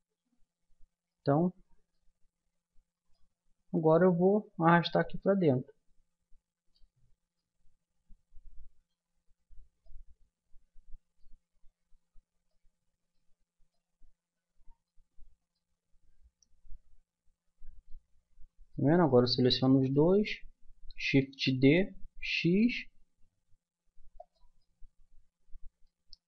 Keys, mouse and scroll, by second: 0.2-1.5 middle drag, 2.9-6.2 middle drag, 7.0-10.0 middle drag, 11.8 middle click, 14.7-17.6 middle drag, 15.0 Tab, 18.9 right click, 19.6-22.2 middle drag, 21.3 shift+d.